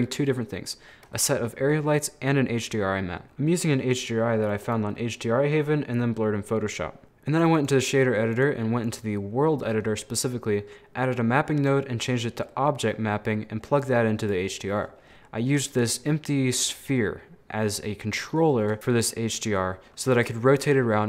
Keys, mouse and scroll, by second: 1.0-1.3 scroll up 1, 1.3 middle click, 1.8 scroll up 2, 1.9-3.2 middle drag, 3.2-3.8 scroll down 11, 3.8-4.1 scroll up 2, 4.5 click, 5.0-7.0 middle drag, 7.0 click, 8.4 click, 9.4 scroll down 4, 9.5 middle click, 9.9-10.5 scroll up 3, 10.0 middle click, 10.5 middle click, 11.2-12.5 drag, 12.5 middle click, 12.9 scroll up 2, 13.8 click, 14.5 middle click, 14.9-16.6 scroll up 7, 16.6 right click, 17.0-21.0 middle drag.